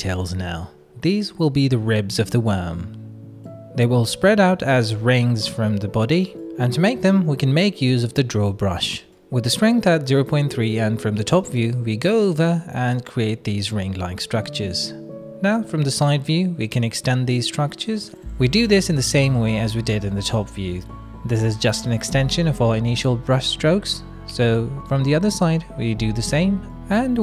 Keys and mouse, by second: 0.4 shift+middle click, 0.7-2.1 middle drag, 4.1 middle click, 6.2 KP_7, 6.8 middle click, 7.7 shift+click, 8.1 click, 10.4 shift+click, 10.5 shift+middle click, 13.2 middle click, 14.7 KP_3, 15.5 click, 16.5 click, 17.1 click, 18.7 click, 19.4 click, 19.8 click, 21.4 ctrl+KP_3, 22.0 shift+middle click, 24.0 click, 24.4 click, 25.4 click.